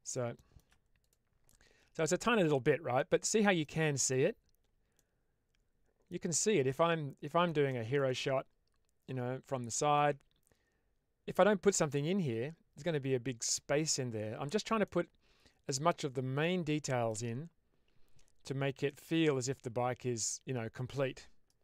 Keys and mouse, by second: 0.3 shift+middle drag, 1.4-2.0 middle drag, 2.9-3.5 middle drag, 4.0 click, 4.9-6.0 middle drag, 6.6-7.4 middle drag, 7.6-7.9 shift+middle drag, 8.0-9.8 middle drag, 14.7-15.5 middle drag, 16.3 middle click, 18.8-20.8 middle drag.